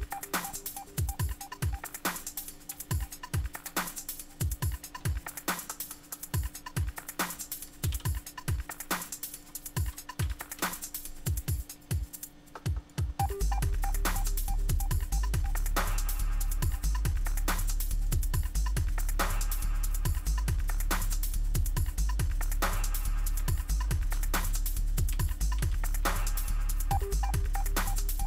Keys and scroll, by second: 3.6 super+Tab, 7.9 super+n, 10.0-10.8 typing, 24.4 super+-, 25.1 super+-, 25.6 super+-.